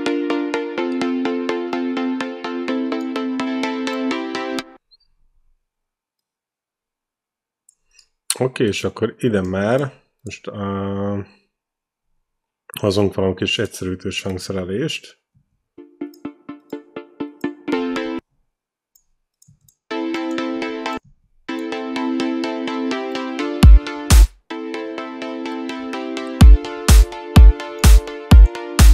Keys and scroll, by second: 4.6 space, 15.6 space, 18.0 space, 19.7 space, 24.0 space, 26.8 ctrl+b.